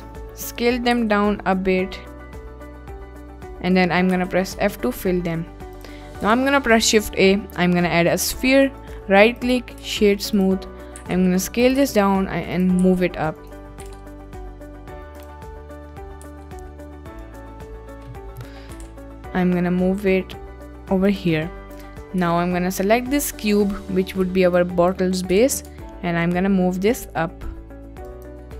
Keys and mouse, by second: 0.9 s, 3.3 click, 4.1 f, 4.6 Tab, 5.7 click, 6.2 shift+a, 8.8-9.5 drag, 9.8 a, 10.3 click, 11.0 s, 11.7 click, 11.8 g, 12.6 z, 12.8 s, 13.4 click, 13.8 g, 14.7 z, 15.2 click, 16.3 s, 17.2 click, 18.7 g, 21.1 click, 21.7 click, 22.2 Tab, 25.4 g, 25.4 z, 28.0 ctrl+click.